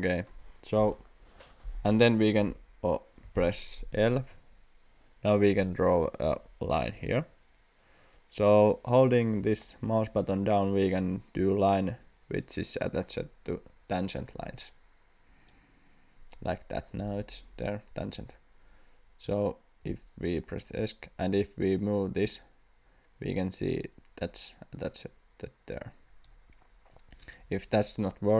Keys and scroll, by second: 3.2 l, 20.2 Escape.